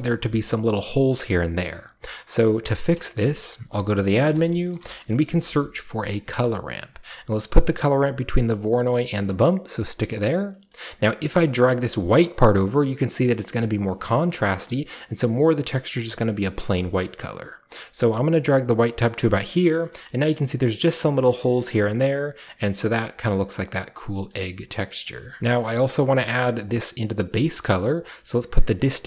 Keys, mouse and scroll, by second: 0.9 shift+scroll up 1, 1.0 scroll down 1, 1.3-2.8 middle drag, 2.8 shift+a, 3.3 shift+click, 4.2-5.1 typing, 6.3 click, 8.8 drag, 9.4 click, 10.0-10.5 scroll up 2, 10.7-11.4 scroll up 1, 11.4-13.9 drag, 11.4-11.8 scroll up 1, 14.1-15.7 scroll down 1, 15.7 click, 16.6 click, 18.7 click, 19.5-20.9 drag, 19.9-20.9 shift+scroll up 2, 20.9 middle drag, 21.4 shift+middle drag, 21.6 shift+middle drag, 22.8-23.2 shift+middle drag, 22.8-24.1 shift+scroll up 1, 23.5-24.1 middle drag, 24.1 scroll up 1, 24.3-25.4 middle drag, 24.3 scroll down 1, 25.0 scroll down 1, 25.4 click, 26.7 click, 28.7-29.0 drag.